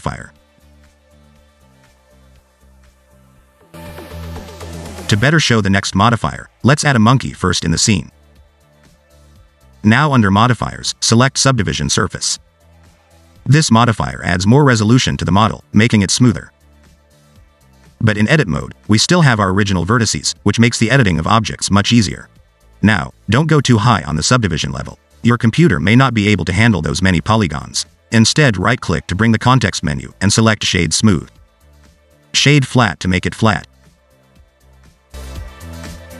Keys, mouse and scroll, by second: 0.1 click, 2.2 click, 5.7 x, 7.0 shift+a, 10.2 middle click, 10.8 scroll up 1, 11.0 middle click, 11.7 click, 16.3 click, 17.3 click, 17.7 click, 19.3 Tab, 20.2 1, 20.7 click, 21.2 g, 22.6 Tab, 23.9 scroll up 2, 24.9 click, 25.7 click, 27.7 right click, 32.2 middle click, 33.3 right click.